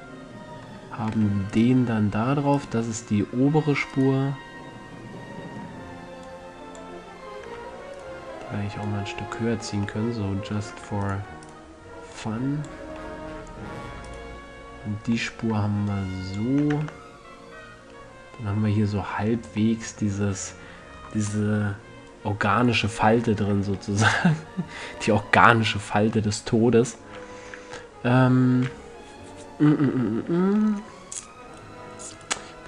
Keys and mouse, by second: 1.9-6.2 drag, 6.2-6.6 middle drag, 6.6-8.2 drag, 8.3-9.2 drag, 10.0 a, 13.4-15.0 middle drag, 16.2-16.9 middle drag, 16.9 a, 17.1 Tab, 17.7-18.0 middle drag, 19.6 Tab, 24.2 middle click, 24.4-25.2 middle drag, 25.4-27.4 middle drag, 31.9-32.6 right drag.